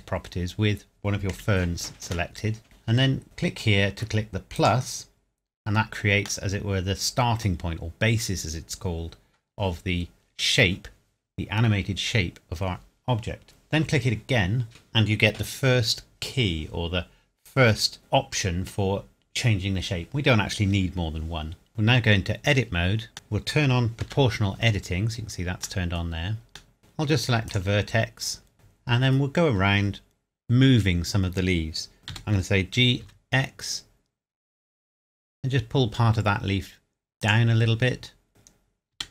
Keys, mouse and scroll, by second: 1.3 KP_Decimal, 2.3 middle click, 4.6 click, 6.4 middle click, 7.7 scroll up 1, 22.0 Tab, 23.1 middle click, 24.0 o, 25.4 scroll up 1, 25.5-25.8 scroll down 1, 25.8 middle click, 26.8 scroll up 1, 27.5 click, 28.5 middle click, 29.2 scroll down 1, 32.0 Escape, 32.1 g, 33.0 x, 33.5-33.9 scroll up 1, 34.0-37.0 scroll down 1, 37.2 click, 39.0 g.